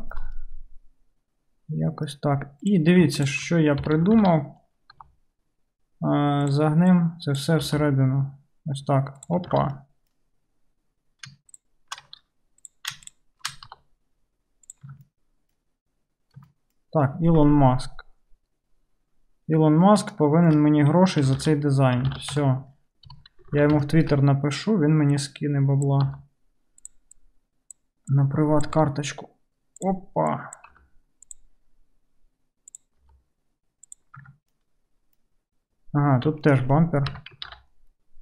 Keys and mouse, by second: 2.7 click, 3.8 KP_3, 4.2 alt+z, 5.0 g, 7.0-9.3 drag, 7.6 g, 9.3-13.1 alt+middle drag, 9.6 alt+z, 13.1 shift+click, 13.2-22.2 shift+middle drag, 13.7 g, 14.9 Tab, 21.4 alt+z, 22.1 alt+z, 22.2 alt+click, 22.4 Tab, 23.1 KP_3, 23.4 alt+click, 23.6 alt+z, 23.7-25.2 shift+middle drag, 25.2-27.0 drag, 26.1 g, 27.0 middle click, 27.1-30.0 drag, 28.8 g, 30.0 middle click, 30.3-31.5 drag, 30.8 g, 31.5-32.7 middle drag, 32.7 click, 32.9-36.4 middle drag, 33.1 g, 34.3 Tab, 36.4 alt+click, 36.7-38.2 middle drag, 37.2 Tab, 37.5 alt+z.